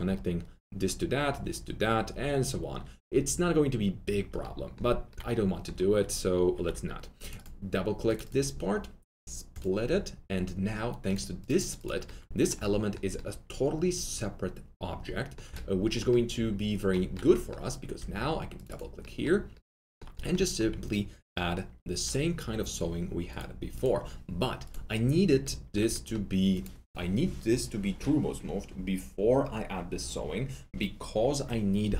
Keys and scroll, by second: 6.6 alt+2, 17.9 alt+2, 19.4 alt+2.